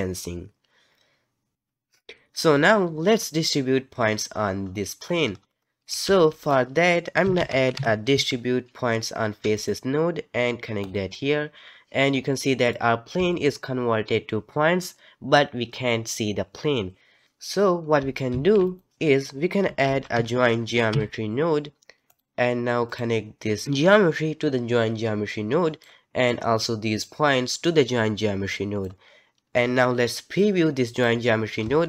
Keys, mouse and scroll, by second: 5.3-6.0 scroll up 4, 6.0 shift+a, 12.3-12.8 middle drag, 12.8-13.1 scroll up 2, 13.3-16.5 shift+middle drag, 18.3 shift+a, 23.6 click, 27.0 click, 30.4 click.